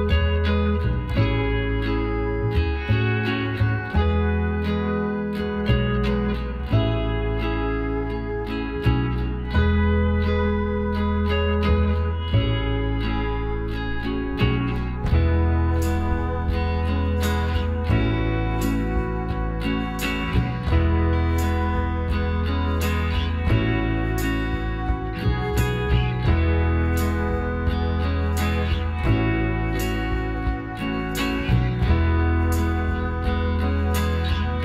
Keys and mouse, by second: 0.3 Tab, 1.1 click, 1.5 middle click, 3.5 KP_Divide, 4.0-5.8 middle drag, 5.2 KP_Decimal, 5.9 middle click, 6.8-8.5 middle drag, 13.9-15.6 drag, 15.0-16.9 right drag, 16.8 f, 17.2 right click, 18.2 ctrl+r, 20.6-22.4 drag, 23.8-25.6 drag, 24.9-27.2 right drag, 26.6 alt+m, 28.3-30.7 right drag, 30.1 alt+m, 31.1 middle click, 33.4 ctrl+r.